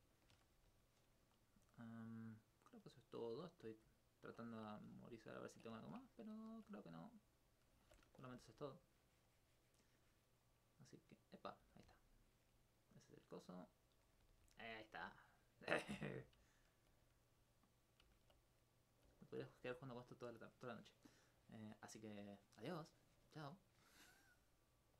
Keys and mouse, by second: 1.2 Tab, 1.6 Tab, 1.9 right click, 2.9 middle click, 5.3 alt+click, 7.3 right click, 7.8 alt+click, 8.3 alt+click, 10.2 right click, 11.6 right click, 13.3 right click, 13.9 right click, 16.0 right click, 16.6 alt+click, 17.2 right click, 17.6 click, 18.1 alt+click, 18.9 right click, 19.2 right click, 23.5 right click.